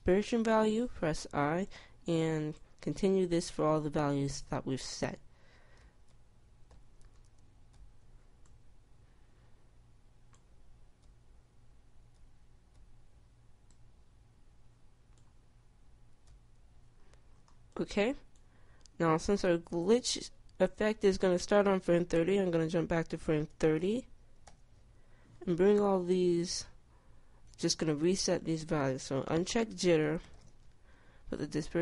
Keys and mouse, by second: 1.1 i, 4.8 i, 6.0 i, 7.0 i, 8.0 i, 11.4 i, 12.4 i, 13.0 i, 16.6 i, 27.9-31.8 drag.